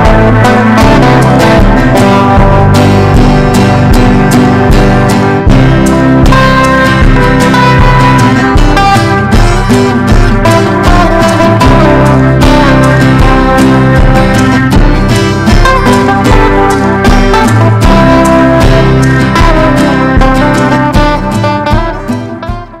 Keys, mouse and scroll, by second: 0.3 typing, 3.7 click.